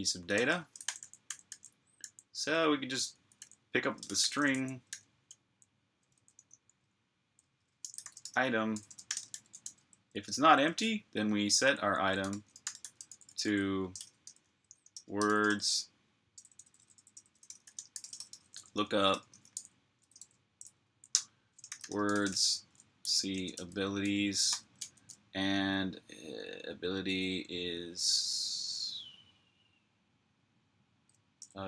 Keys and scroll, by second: 0.0-1.8 typing, 21.3-24.4 typing, 31.2 typing.